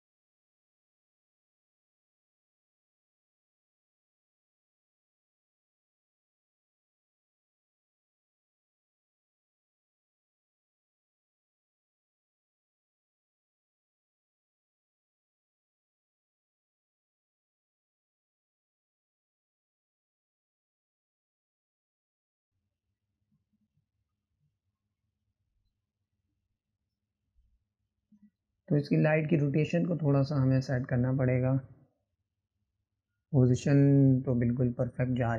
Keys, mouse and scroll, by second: 3.5 click, 6.4 right click, 6.8 click, 8.5 click, 11.6-16.3 drag, 16.3-17.6 middle drag, 16.7 click, 19.6-22.5 drag, 27.9-29.0 middle drag, 29.0-29.8 scroll down 1, 29.8-32.8 middle drag, 32.8 click, 34.7-35.3 drag.